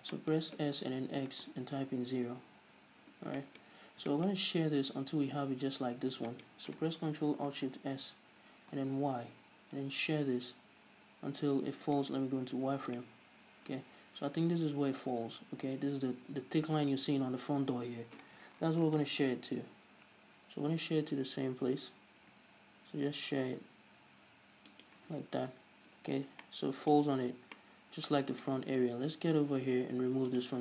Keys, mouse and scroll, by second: 0.1-0.5 scroll down 1, 1.1 s, 2.9 Return, 3.7 shift+middle click, 4.1-4.5 scroll up 1, 4.5 shift+middle click, 6.3 scroll up 1, 6.7 shift+middle click, 7.9 ctrl+alt+shift+s, 11.9 middle click, 12.4 right click, 12.5 z, 19.3 ctrl+alt+shift+s, 25.2 shift+click, 25.5-25.9 scroll down 1, 25.9-26.6 scroll up 1, 26.6 scroll down 1, 26.8-30.6 middle drag, 27.5 z.